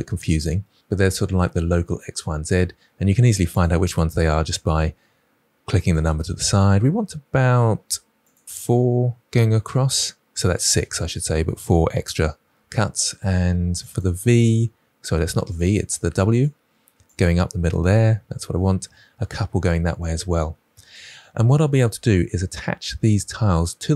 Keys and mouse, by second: 4.4 click, 6.0 click, 13.8 click, 15.4 click, 16.3 click, 17.0 click.